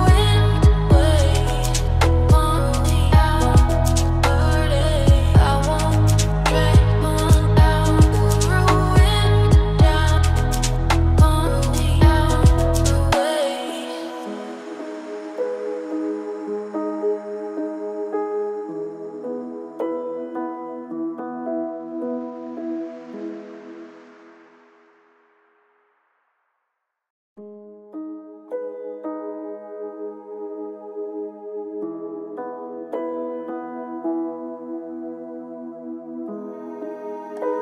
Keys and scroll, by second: 1.4 ctrl+shift+].